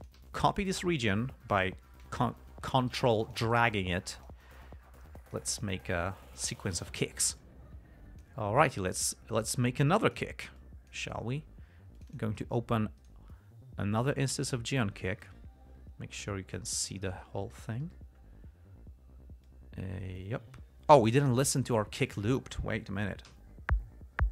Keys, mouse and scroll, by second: 0.7-3.2 ctrl+drag, 3.6 ctrl+click, 4.9-7.0 ctrl+drag, 7.7 click, 9.8 click, 10.9 click, 12.3 click, 13.3 right click, 14.8 click, 15.6-17.5 drag, 19.8-21.5 drag, 21.9 ctrl+scroll down 2, 22.4 ctrl+click, 23.6 l.